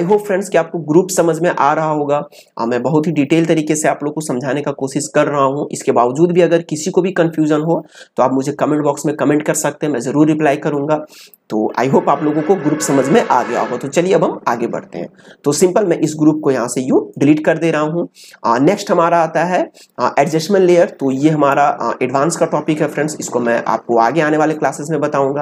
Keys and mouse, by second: 16.0-19.5 drag.